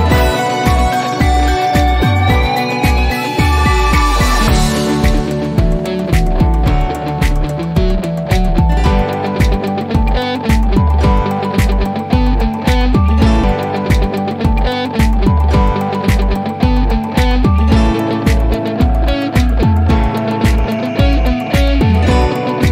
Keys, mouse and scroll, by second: 0.0 click, 3.9 click, 6.3-8.3 drag, 8.8 right click, 9.8 l, 11.0 scroll down 1, 13.1-16.8 drag, 19.0 scroll up 1, 20.3-22.4 drag.